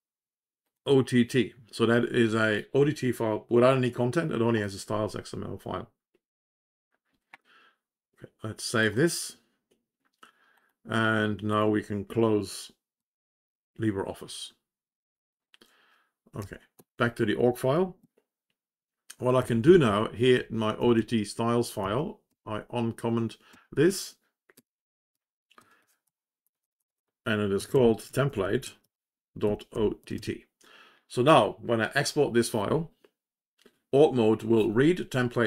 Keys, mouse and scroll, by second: 16.3 Down, 16.7 Return, 19.4 Down, 19.6 Down, 19.8 Down, 20.3 Home, 20.7 Right, 20.9 Right, 21.7 Left, 22.2 Delete, 23.4 End, 24.5-30.6 typing.